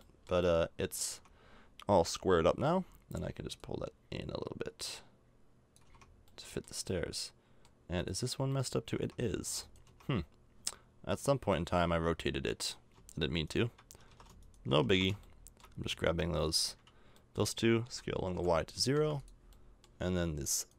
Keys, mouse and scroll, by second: 1.1 Tab, 2.5 l, 5.8 a, 5.8 Tab, 6.3 middle click, 8.9 Tab, 9.4 Tab, 9.9 Tab, 11.1 middle click, 12.2 right click, 14.1 ctrl+z, 14.9 ctrl+z, 15.3-17.8 middle drag, 17.8 s, 19.5 middle click.